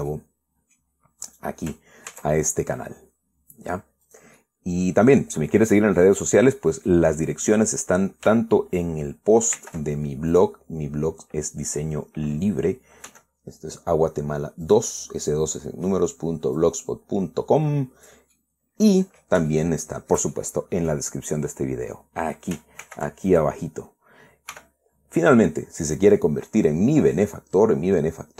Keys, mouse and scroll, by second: 0.4 right click, 0.8 middle click, 2.0 right click, 2.8 ctrl+a, 4.8 click, 5.0-6.4 middle drag, 6.7-7.8 middle drag, 7.9 middle click, 10.3 ctrl+r, 11.0 click, 13.8 g, 15.4-16.8 drag, 17.3-19.0 drag, 19.0-20.1 middle drag, 20.2-21.8 shift+middle drag, 23.5 ctrl+r, 24.0 ctrl+click, 25.2 g, 26.6-28.1 drag, 28.1 scroll down 2.